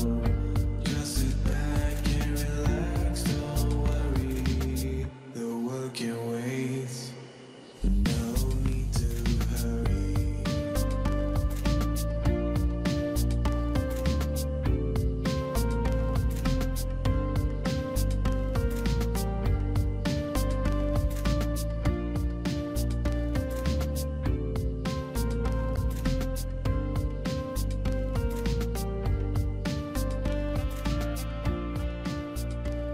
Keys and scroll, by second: 18.6-19.7 Delete, 26.4 ctrl+v, 27.1 Return, 27.8 ctrl+z, 29.7 ctrl+v, 30.4 Return.